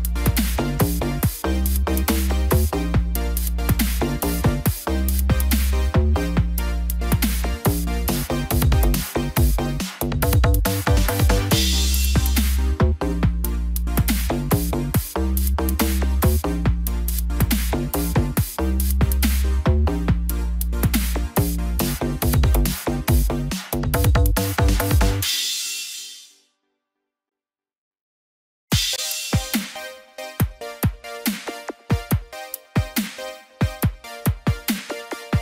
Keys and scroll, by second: 18.2 ctrl+t, 32.0 ctrl+=.